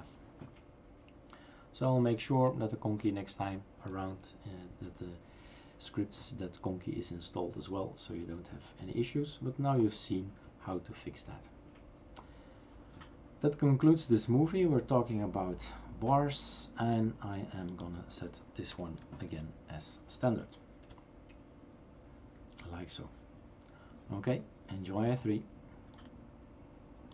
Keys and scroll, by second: 18.7 BackSpace, 19.2 ctrl+s, 20.9 shift+super+r.